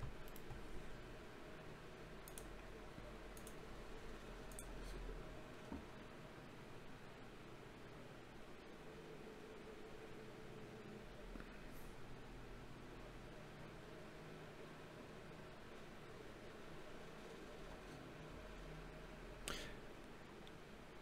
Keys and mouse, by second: 3.2 KP_5, 3.8 KP_3, 12.3 n, 14.3 n.